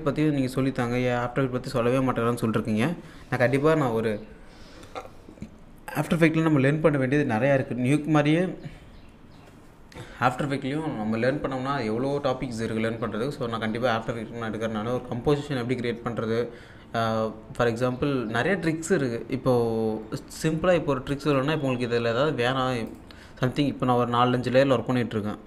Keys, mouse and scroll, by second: 21.1 click, 22.8 click.